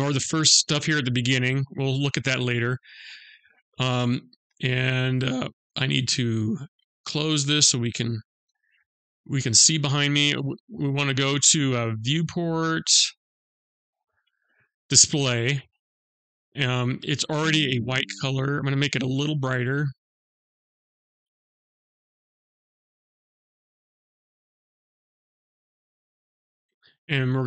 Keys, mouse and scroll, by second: 0.4-2.2 scroll down 11, 2.2-3.0 scroll down 7, 4.8 scroll down 1, 7.0 click, 7.6-8.2 scroll down 2, 11.1 click, 11.7 scroll down 2, 13.1 click, 15.8 click, 23.2 click, 27.0 click.